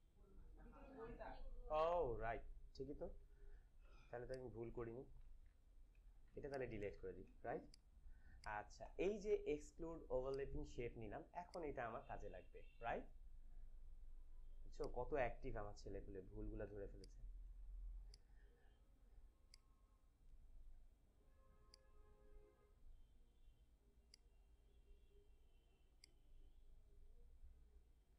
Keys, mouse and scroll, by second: 2.8 click, 2.9 ctrl+=, 4.0 space, 4.2 click, 4.6 space, 5.3 ctrl+=, 6.5 click, 6.8 d, 7.4 space, 7.8 click, 8.0 space, 8.3 click, 10.2 space, 10.5 click, 14.7 click, 16.2 ctrl+=, 16.8 space, 16.9 click, 17.4 space, 18.0-28.1 drag.